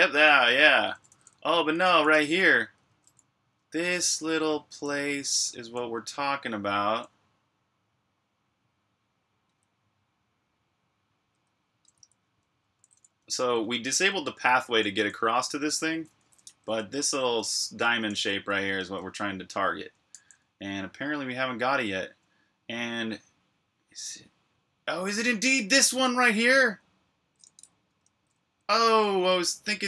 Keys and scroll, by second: 0.0-1.7 typing, 8.5-9.3 typing, 12.4-18.9 typing, 20.0 j, 21.6 typing, 25.5-26.1 typing, 28.0 ctrl+v, 28.5-29.8 typing.